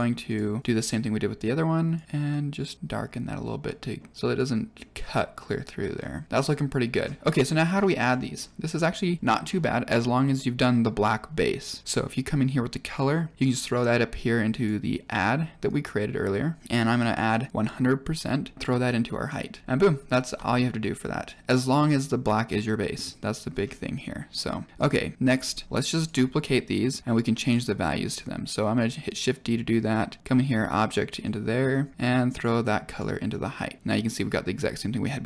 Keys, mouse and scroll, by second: 0.2 click, 3.6-3.9 middle drag, 4.1 scroll up 3, 4.3-4.7 middle drag, 5.9 scroll down 2, 6.3 middle click, 7.0 scroll down 5, 7.2 middle click, 7.7-8.0 scroll down 2, 8.0 middle click, 10.6 click, 11.8-14.6 drag, 15.6-16.6 drag, 16.9 click, 18.5 click, 20.9 click, 23.1 middle click, 23.6-23.9 scroll down 3, 24.4 click, 24.7 middle click, 24.8 middle click, 25.6-26.0 drag, 27.0 shift+d, 28.0 click, 29.0-30.2 drag, 31.2 middle click, 32.0 click.